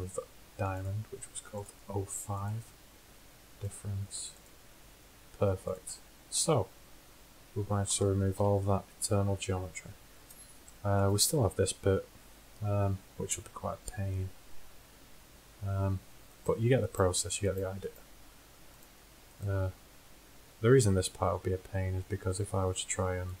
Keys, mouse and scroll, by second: 1.7-3.5 drag, 3.8-5.4 drag, 6.7-8.0 middle drag, 8.4 KP_1, 13.4-16.5 middle drag, 16.5-21.1 drag, 21.1-23.4 middle drag.